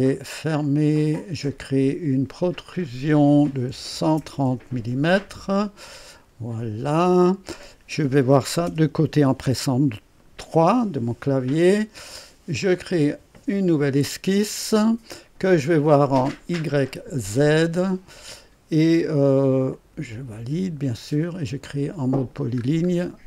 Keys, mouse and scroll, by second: 0.6 click, 2.7 click, 3.7 KP_1, 4.2 KP_0, 4.4 KP_Enter, 5.4-6.4 scroll down 4, 7.1 click, 9.5 right click, 12.6 click, 16.6 click, 19.7 click, 21.9 click, 22.6 scroll up 1.